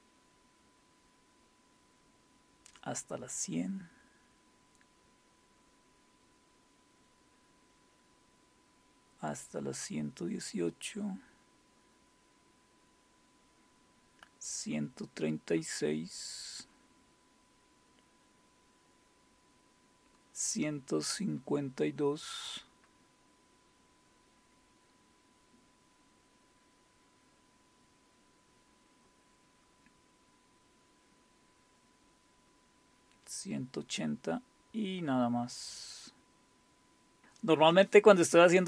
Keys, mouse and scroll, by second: 0.2-0.9 scroll down 1, 4.3-6.2 scroll down 3, 6.2-6.9 scroll down 1, 6.9-8.9 scroll down 1, 9.5-12.0 scroll down 4, 12.0-12.9 scroll up 2, 15.3-16.0 scroll down 2, 16.0-18.3 scroll down 2, 18.3-18.9 scroll down 1, 21.1-24.9 scroll down 5, 28.3-30.4 scroll down 3, 32.5-33.6 scroll down 2, 33.6-37.2 scroll down 5, 37.2 typing.